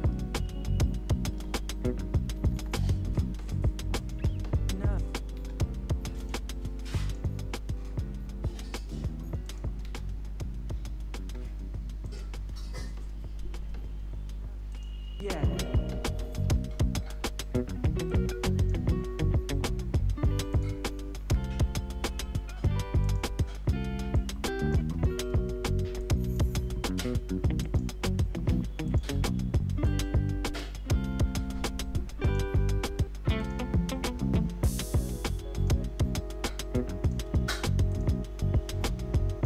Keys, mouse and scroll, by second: 1.3-3.0 typing, 4.0 click, 4.1 space, 6.2 click, 9.8 space, 12.0 click, 12.4 u, 14.7 click, 16.4 ctrl+0, 18.1-20.5 drag, 21.2 ctrl+y, 23.0 click, 24.8 Return, 26.0-27.6 drag, 28.4 F4, 28.9 click.